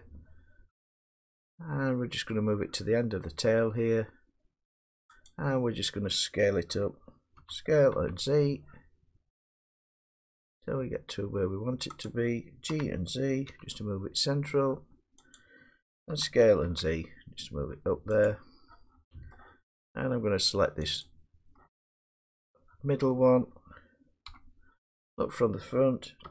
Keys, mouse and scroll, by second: 5.3 click, 7.4 s, 7.9 z, 12.0 click, 12.7 g, 13.5 z, 15.4 click, 16.1 s, 16.7 z, 18.2 click, 19.3 middle click, 21.0 click, 23.2 middle click, 24.3 1, 26.2-26.3 typing.